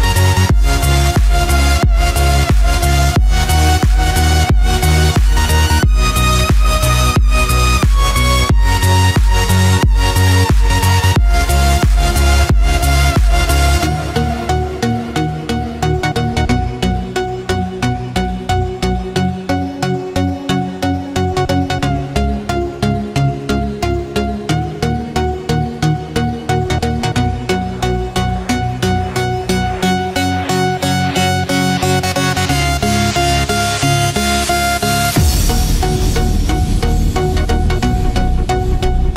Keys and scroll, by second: 3.1 ctrl+z, 5.1 ctrl+-, 6.9 ctrl+0, 7.8 ctrl+=, 9.2 ctrl+space, 9.7 ctrl+=, 14.9 ctrl+z, 17.9 ctrl+-, 19.4 ctrl+=, 22.5 ctrl+z, 29.2 ctrl+=, 37.0 ctrl+-, 37.7 ctrl+0, 38.2 ctrl+=.